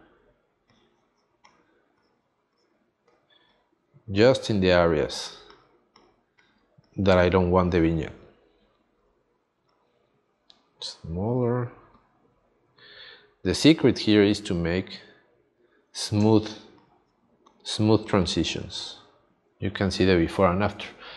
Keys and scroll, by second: 16.2 space.